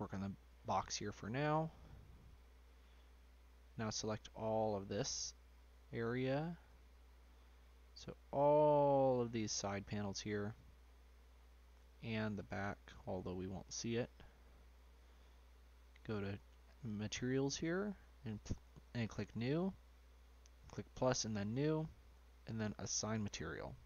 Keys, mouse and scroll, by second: 0.5 middle click, 0.9-2.2 scroll down 2, 2.2-3.4 drag, 3.4 middle click, 3.8 scroll up 1, 4.1 shift+click, 5.2-6.6 middle drag, 6.6 shift+click, 7.3-8.3 middle drag, 8.3-9.6 shift+drag, 10.1-12.1 middle drag, 12.1 shift+click, 13.6 middle click, 14.4-15.5 scroll down 1, 15.5 scroll down 1, 15.8 click, 17.7-22.9 drag, 23.7-23.8 scroll up 3.